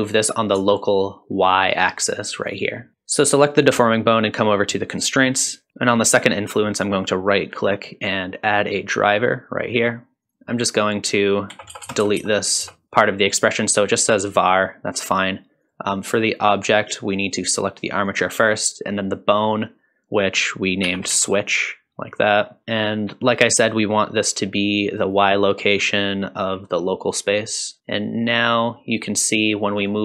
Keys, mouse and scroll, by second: 0.9-2.5 shift+drag, 2.9-4.1 scroll down 1, 6.7-20.3 right drag, 11.8 BackSpace, 12.0 BackSpace, 20.3-27.8 drag, 28.2-29.8 scroll down 3, 29.8 click, 29.8 scroll down 1.